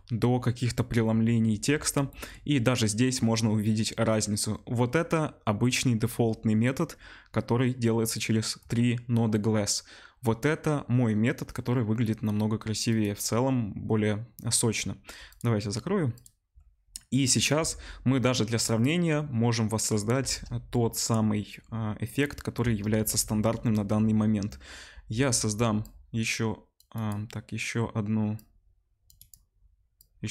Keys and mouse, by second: 17.5 z, 20.2 shift+a, 22.9 shift+a, 25.8-27.1 drag, 27.1-28.4 middle drag, 28.4 click, 29.2 middle click, 29.9-30.3 drag.